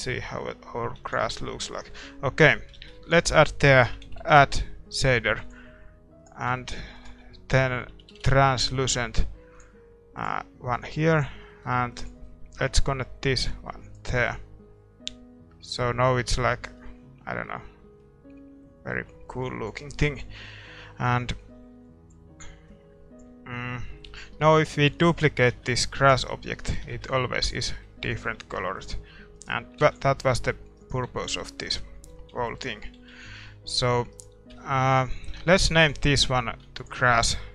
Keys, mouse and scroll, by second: 0.1 middle click, 6.2-15.1 drag, 6.2 d, 6.7-11.2 middle drag, 11.6-13.9 middle drag, 15.1-29.8 middle drag, 23.6 click, 25.0-26.7 right drag, 25.5 shift+d, 26.9 shift+d, 28.8 x, 29.4 right click, 30.4 ctrl+s, 30.4-31.6 middle drag, 31.2 x, 31.8 middle click, 31.8 right click, 32.2 click, 32.2 z, 32.5-34.1 middle drag, 33.0 z, 34.1-35.3 drag, 34.1-37.5 right drag, 35.3-37.5 middle drag.